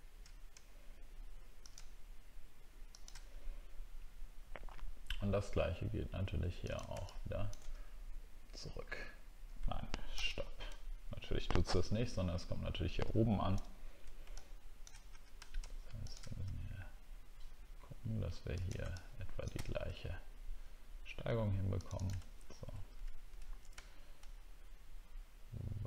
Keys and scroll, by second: 22.4 alt+scroll down 1, 23.8 alt+scroll down 1.